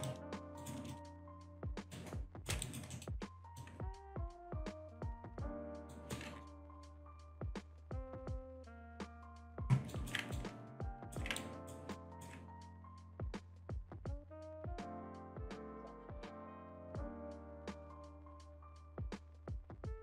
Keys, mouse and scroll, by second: 0.1 alt+click, 0.9 alt+click, 1.3 alt+shift+click, 1.7 alt+middle click, 1.9 shift+right click, 2.6 alt+right click, 2.9 alt+middle click, 3.5 click, 4.4 click, 5.9 alt+right click, 6.8-7.2 scroll up 1, 8.1-8.5 scroll up 1, 8.8 click, 9.9 alt+right click, 10.3 ctrl+right click, 11.4 ctrl+right click, 11.9 ctrl+right click, 13.5 click, 16.8 click, 17.7 ctrl+z, 18.5 click.